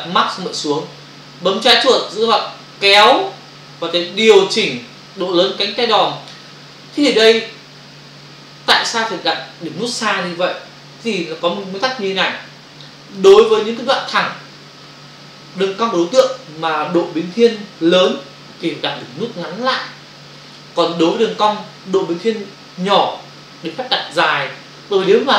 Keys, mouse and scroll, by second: 2.4 click.